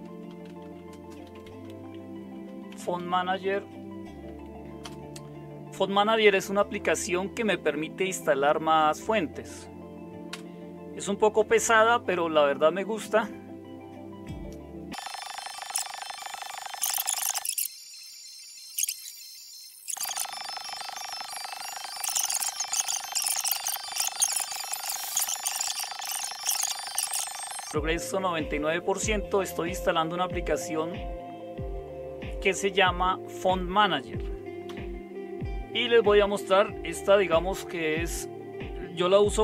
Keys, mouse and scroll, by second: 0.0-4.8 typing, 10.3 Return, 23.0 super+3, 23.8 super+1, 24.9 alt+super+KP_9, 26.3 alt+super+KP_2, 31.6 Up, 34.6 Down.